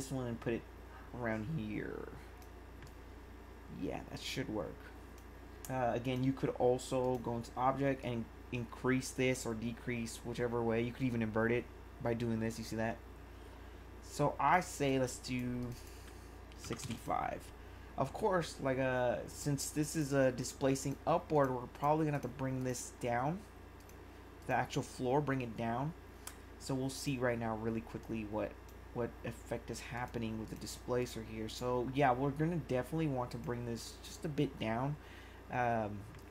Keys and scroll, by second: 16.4-17.3 typing.